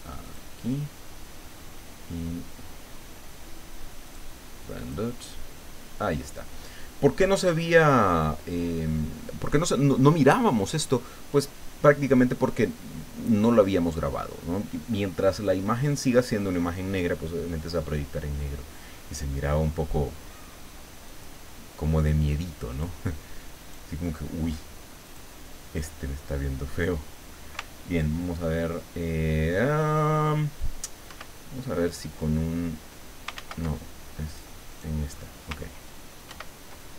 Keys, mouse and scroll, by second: 0.2 click, 4.1 click, 4.8 click, 21.1 click, 22.7 click, 23.6 right click, 25.1 click, 26.4-27.5 drag, 31.1 ctrl+2, 33.4 ctrl+z, 33.7-34.2 ctrl+scroll down 2, 34.2 right click, 34.7 right click, 35.2-36.3 scroll up 1, 36.3 ctrl+2.